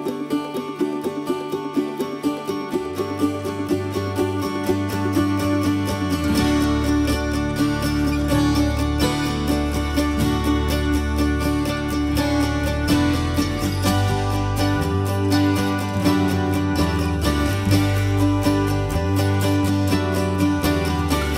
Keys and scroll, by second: 2.2 Escape, 4.1 Escape, 7.0 m, 9.1 l, 10.6 p, 12.1 ctrl+z, 12.7 l, 14.4 Escape, 15.4 p, 16.4 Escape, 17.3 m.